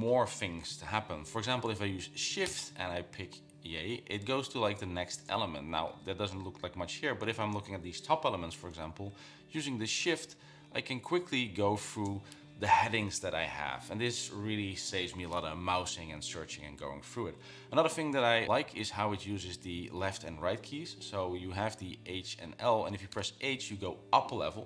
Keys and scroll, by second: 2.6 shift+j, 4.5 shift+j, 5.6 k, 6.0 k, 6.3 k, 9.3-11.6 typing, 19.4-19.9 typing, 23.3 h.